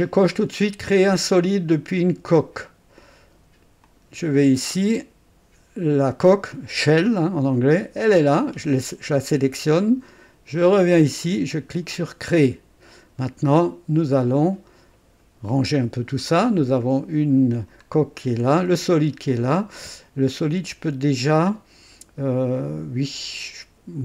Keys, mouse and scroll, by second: 2.3 click, 3.8 click, 4.4 scroll down 2, 7.9 click, 10.5 click, 12.2 click, 14.3 click, 17.9-19.3 scroll down 1, 19.3 click.